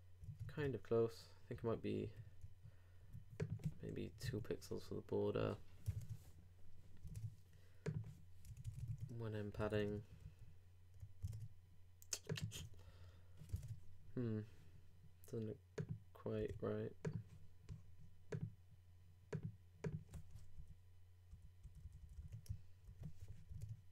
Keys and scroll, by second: 0.6 super+Tab, 1.6 super+2, 2.8 super+3, 5.9 super+Tab, 9.5 super+i, 9.6 super+s, 9.8 super+Tab, 11.2 super+Tab, 13.6 super+Tab, 16.4 super+w, 20.5 alt+Down, 22.5 alt+super+Down, 22.8 alt+super+r, 23.4 super+r, 23.5 super+Tab.